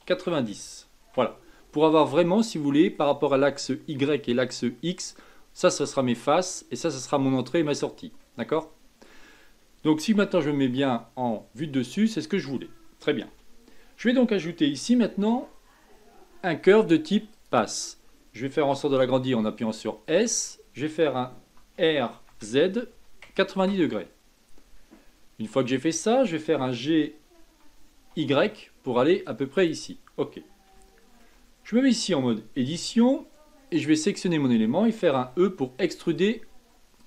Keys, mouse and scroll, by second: 1.1 KP_Enter, 2.4-4.1 middle drag, 4.1 scroll up 1, 8.2-9.4 middle drag, 9.4 scroll down 2, 10.2 KP_7, 11.1-13.2 middle drag, 13.2 KP_7, 15.1 shift+a, 19.4 s, 21.6 r, 24.5-25.4 scroll down 6, 25.6-26.5 scroll up 1, 26.5 g, 30.7-32.7 shift+middle drag, 32.7 Tab, 33.7 click, 35.2 e, 36.3-37.0 typing.